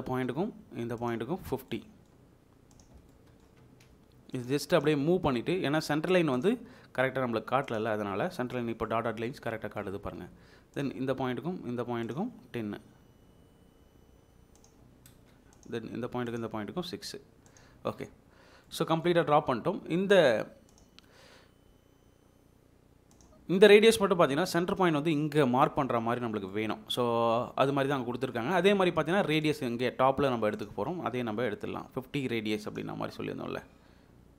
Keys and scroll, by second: 3.9 Escape, 7.9 Escape, 10.1 space, 14.7 Escape, 15.1 space, 17.7 Escape.